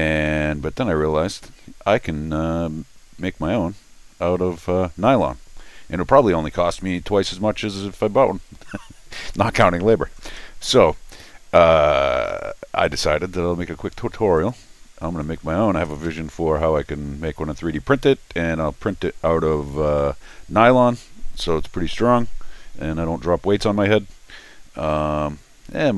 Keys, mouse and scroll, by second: 14.4 click.